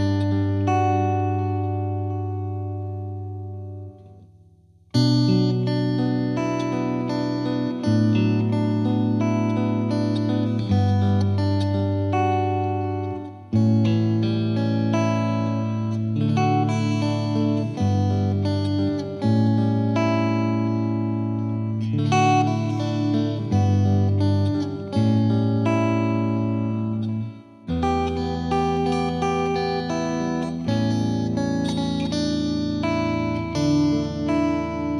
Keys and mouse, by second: 3.9-4.9 drag, 5.7 click, 9.7 click, 12.1 click, 14.5 click, 19.9 click, 21.1 click, 23.2 click, 25.3 click, 27.5 click, 28.4 click, 29.8 click, 31.9 click.